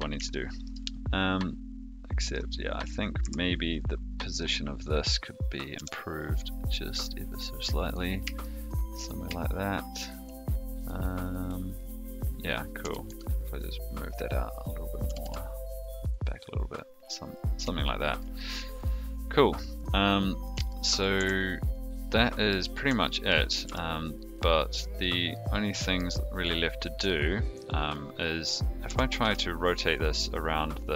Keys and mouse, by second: 0.2 shift+middle click, 3.2 Tab, 5.7 g, 8.4 shift+middle click, 9.3 shift+middle click, 10.7 click, 12.8 g, 15.0 g, 17.9 shift+middle click, 20.6 shift+middle click, 21.1 Tab, 21.7 click, 22.1-22.4 middle drag, 23.0 shift+middle drag, 23.6 g, 25.3-25.9 middle drag, 27.1-27.5 shift+middle drag, 28.8 r.